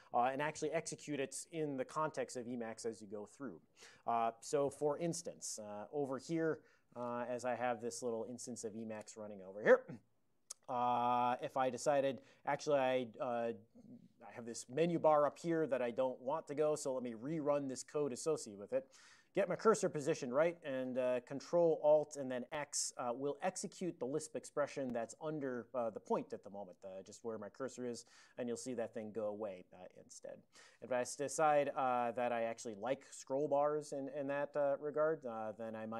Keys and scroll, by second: 6.9 super+j, 7.4 super+Right, 10.6 ctrl+p, 10.8 ctrl+p, 10.9 ctrl+p, 11.1 ctrl+p, 28.1 ctrl+alt+x, 32.0 ctrl+p, 32.6 ctrl+n, 33.0 ctrl+n, 33.3 alt+f, 34.0 ctrl+d, 34.7 ctrl+d.